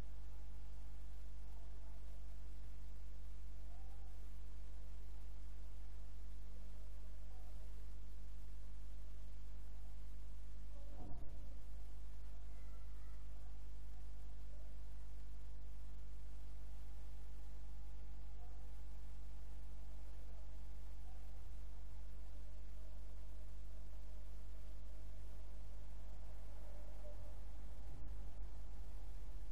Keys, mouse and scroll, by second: 5.2 click, 26.1 click.